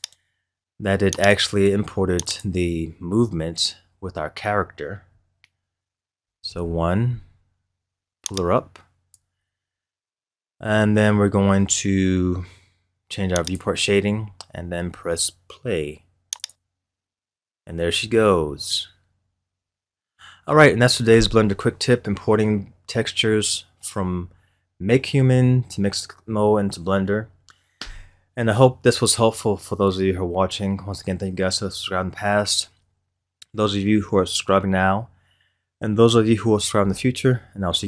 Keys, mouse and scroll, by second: 1.6-2.8 right drag, 2.8-3.5 scroll down 6, 6.4 KP_1, 8.3-11.8 drag, 13.4 click, 16.9 click.